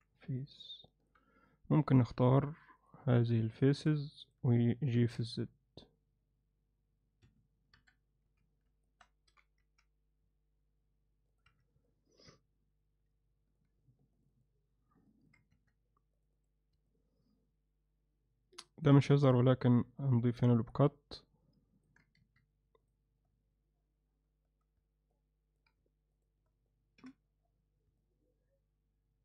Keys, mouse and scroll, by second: 0.4 middle click, 2.1 3, 3.3 shift+click, 4.0 middle click, 4.9 g, 7.8 KP_1, 8.3 z, 9.0 ctrl+alt+middle click, 9.3 g, 11.5 z, 11.9-13.6 alt+middle drag, 15.1 middle click, 15.6 2, 16.9-18.9 alt+middle drag, 19.3 f, 20.0-21.9 middle drag, 22.2 1, 25.1 middle click, 27.0 f, 28.0-29.2 middle drag.